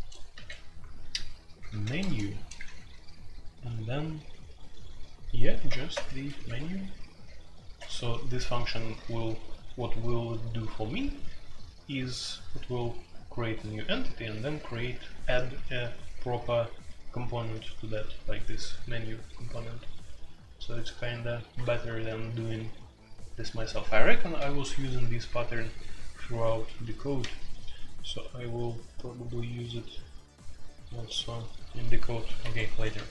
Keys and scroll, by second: 0.0-0.3 typing, 1.7-2.6 typing, 5.6 typing, 6.4 Escape, 11.8-12.3 typing, 14.1-14.7 typing, 17.2-17.5 typing, 32.4 Escape, 32.7-33.1 typing.